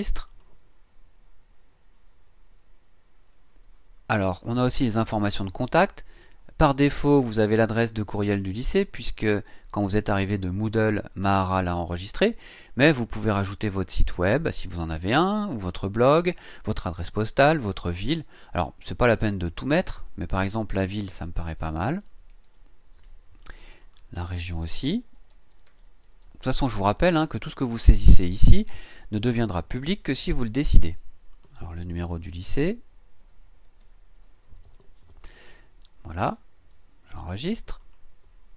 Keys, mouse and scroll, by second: 0.3 click, 4.4 click, 16.3-16.6 scroll down 1, 18.3 click, 20.5-23.0 typing, 23.8 click, 24.6-26.7 typing, 27.5-30.4 scroll down 2, 31.3 click, 32.1-34.7 typing, 35.5-36.3 scroll up 2, 36.3-37.8 scroll down 2, 37.8 click.